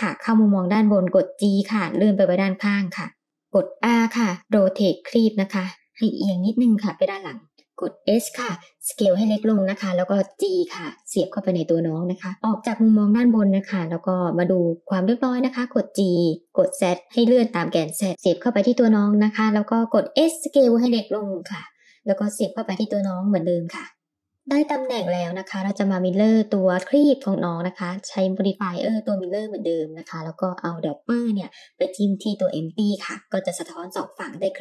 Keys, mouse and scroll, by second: 1.1 g, 4.1 r, 6.0 g, 8.2 s, 9.6 g, 10.9-11.8 middle drag, 13.5-15.5 middle drag, 15.6 g, 19.9 s, 21.4 g, 23.3-24.3 middle drag, 24.5 g, 26.0-28.0 drag, 28.7 click, 30.8-33.1 middle drag, 33.5 Tab, 34.1 Tab.